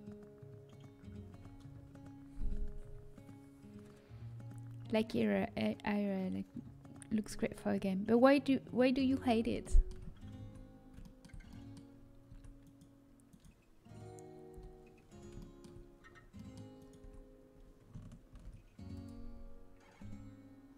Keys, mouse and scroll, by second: 1.3 middle click, 1.9-4.7 middle drag, 10.0 middle click, 10.3 Tab, 12.2 Tab, 12.5-14.0 right drag, 14.8 h, 16.7 right click, 16.9 Tab, 16.9-18.6 drag, 18.6 ctrl+r.